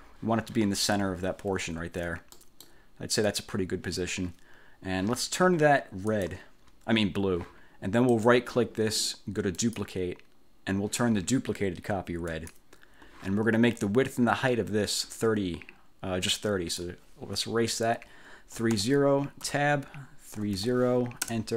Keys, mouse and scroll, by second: 1.8 ctrl+scroll down 2, 2.4 ctrl+click, 6.2 click, 8.3 click, 9.6 click, 12.4 click, 16.4 click, 18.5-21.2 typing, 19.6 Tab, 21.4 Return.